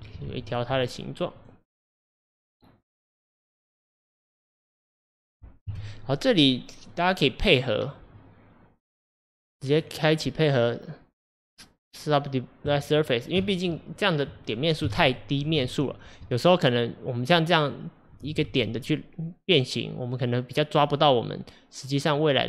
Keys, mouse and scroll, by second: 0.3 ctrl+z, 0.9 click, 1.4 click, 2.2 click, 3.3 click, 4.1 scroll down 1, 4.3-5.7 middle drag, 5.7 KP_1, 7.0-9.1 middle drag, 9.1 click, 9.8-12.8 drag, 14.9 KP_1, 15.4 KP_3, 16.2 scroll up 1, 16.9 click, 18.5 g.